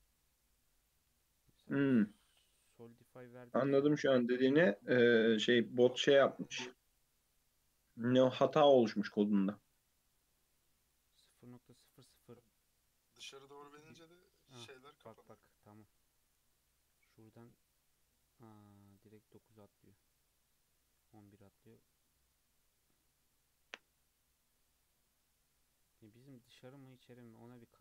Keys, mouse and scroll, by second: 0.0-1.7 scroll down 1, 1.7-4.7 drag, 6.9-13.8 drag, 17.0-24.5 drag.